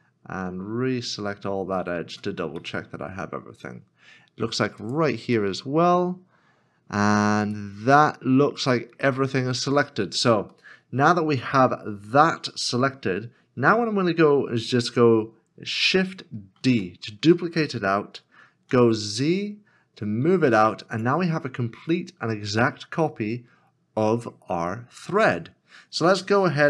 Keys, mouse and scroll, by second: 2.6 middle click, 3.1-5.4 scroll down 1, 5.4 middle click, 6.0-7.0 scroll down 1, 7.5 right click, 8.1 middle click, 9.3 scroll down 1, 10.7 scroll down 1, 10.7 middle click, 15.7 middle click, 16.5 shift+d, 18.7 z, 22.0 middle click.